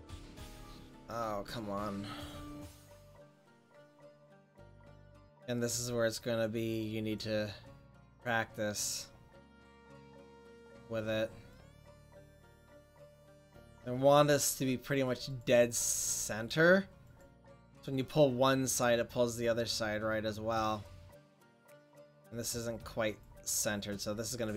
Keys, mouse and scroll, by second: 5.7 f, 6.4-8.9 drag, 10.7-13.5 middle drag, 13.5-18.4 drag, 18.4 middle click, 19.1 click.